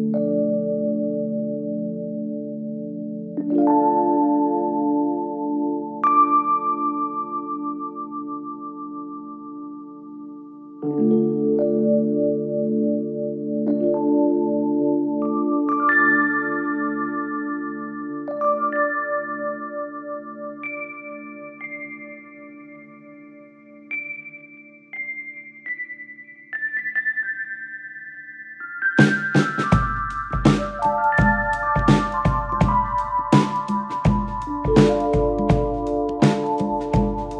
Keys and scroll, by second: 1.5 4, 9.6 3, 12.2 ], 15.1 ctrl+z, 16.1 ], 17.8 shift+f, 19.2 ], 20.9 4, 22.7 3.